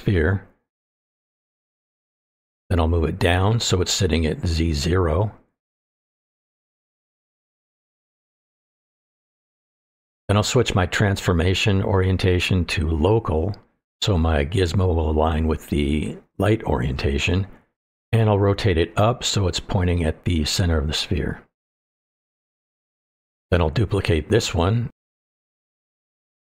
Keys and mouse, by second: 0.4 shift+middle click, 0.6-1.0 middle drag, 1.5-2.6 drag, 3.4-4.3 middle drag, 4.8 click, 5.5-6.3 middle drag, 7.6 click, 8.8-10.5 drag, 10.5 middle click, 10.9 n, 11.7-12.5 middle drag, 13.7-14.9 drag, 15.0-15.5 middle drag, 16.2 click, 16.4 middle click, 17.6-19.8 ctrl+drag, 20.0-22.1 middle drag, 22.5-23.7 middle drag, 23.9-24.3 middle drag, 24.8 click, 25.0 middle click, 25.7 shift+d.